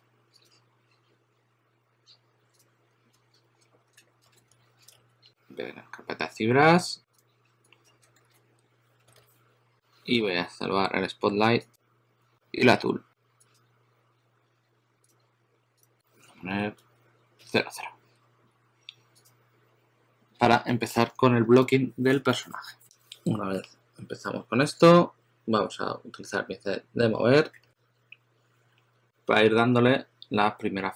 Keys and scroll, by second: 3.6 shift+super+n, 4.0-5.4 typing, 7.6-9.6 typing, 14.3 typing, 16.5-17.5 typing, 23.5 typing, 24.6 typing, 27.5 typing, 28.7 typing.